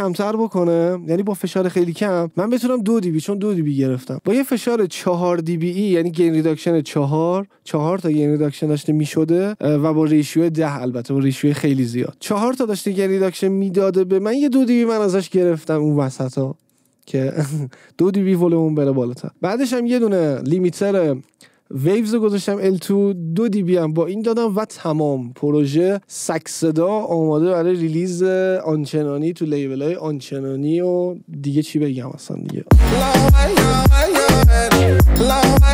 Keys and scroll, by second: 32.9 space.